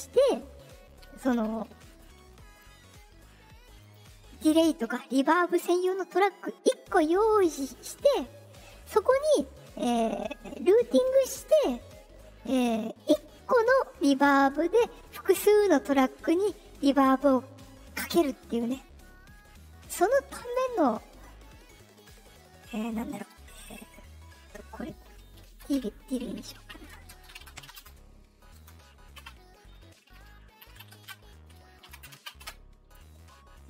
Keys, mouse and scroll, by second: 1.9 right click, 3.7 click, 6.0 right click, 20.4 click, 21.9 click, 22.2 middle click, 22.2 scroll down 2, 26.4 BackSpace, 27.5 r, 27.8 space, 28.5 space.